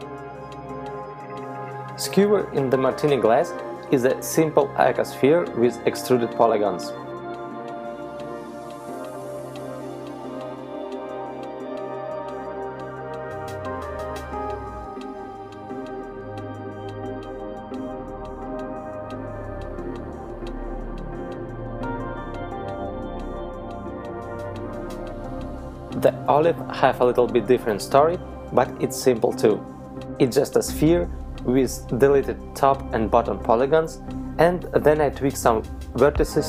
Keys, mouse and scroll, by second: 1.0 middle click, 1.7 z, 2.1 shift+middle click, 3.0 right click, 4.3 shift+middle click, 6.6 KP_Decimal, 7.6 z, 8.2 middle click, 9.1-9.8 scroll up 2, 10.2 shift+middle click, 11.5 middle click, 13.9-14.6 scroll up 2, 15.3 shift+middle click, 16.1 middle click, 20.4-21.0 scroll down 4, 22.2 shift+middle click, 22.2 right click, 23.2 h, 23.7 right click, 24.1 h, 24.6 right click, 24.8 h, 25.3 right click, 26.0 KP_Decimal, 26.4 z, 28.4 middle click.